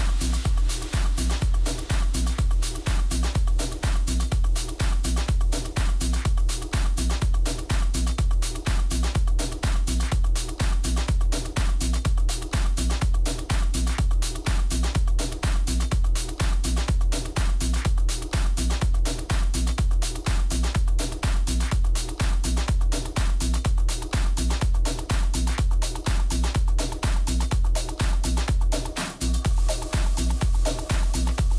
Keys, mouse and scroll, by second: 4.4-13.2 middle drag, 12.6 a, 13.2-15.1 right drag, 13.9 a, 15.0 middle click, 15.8-17.6 right drag, 16.3-17.6 middle drag, 18.1-19.2 middle drag, 19.2-21.1 drag, 26.0-27.7 drag, 27.2-29.1 middle drag, 27.8 click, 28.6-30.4 drag.